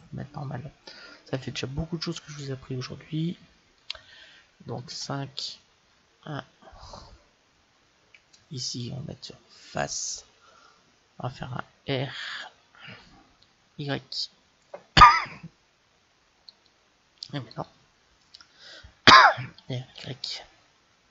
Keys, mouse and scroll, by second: 4.7 KP_5, 5.7 KP_1, 8.5-10.4 drag, 13.1 r, 17.4-19.3 right drag, 19.7 r.